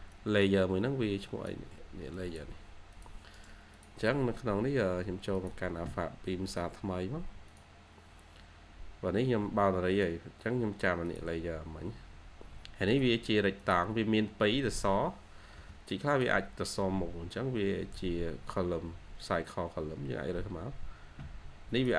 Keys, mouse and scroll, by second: 3.2 right click, 4.1-4.6 scroll down 1.